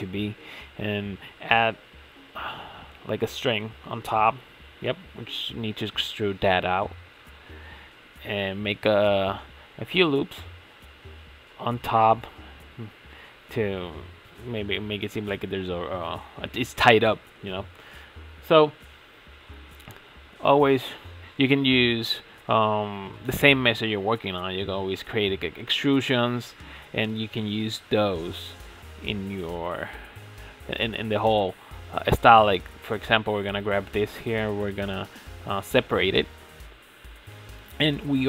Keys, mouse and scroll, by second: 0.0-0.6 middle drag, 0.6 Tab, 0.8-1.3 scroll up 2, 1.3 click, 2.2 3, 2.3 click, 4.0 click, 4.3 scroll down 3, 4.6 middle click, 5.3 KP_Decimal, 5.7 ctrl+s, 6.1-6.8 scroll down 6, 6.8 middle click, 7.0 scroll down 1, 9.0-10.1 middle drag, 10.1 e, 14.2-15.3 shift+middle drag, 15.3 e, 19.5 right click, 20.1 x, 21.8 3, 22.2 alt+click, 23.3 e, 24.3 ctrl+z, 24.8 s, 26.0 e, 27.5 s, 29.3-30.1 middle drag, 30.1 scroll up 2, 30.4-32.2 middle drag, 32.2 scroll up 3, 33.6 alt+shift+click, 34.1-35.6 middle drag, 35.6 alt+shift+click, 35.9-36.2 scroll down 2, 36.2-38.2 middle drag.